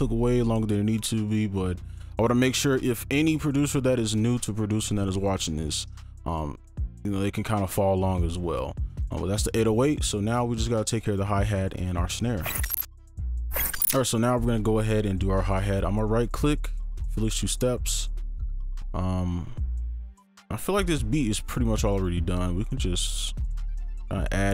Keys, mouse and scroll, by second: 15.9 right click, 19.3 ctrl+click, 20.4 Delete, 21.4-22.9 scroll up 1.